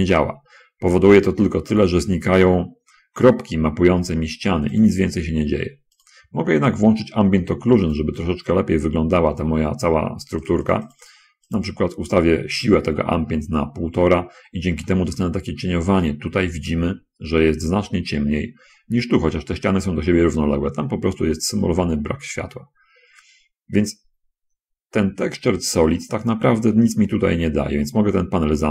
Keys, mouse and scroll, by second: 0.3 click, 1.0 middle click, 5.1 click, 6.4 click, 8.2 click, 10.8 click, 14.4 middle click, 15.0-16.2 drag, 17.0 middle click, 28.2 n.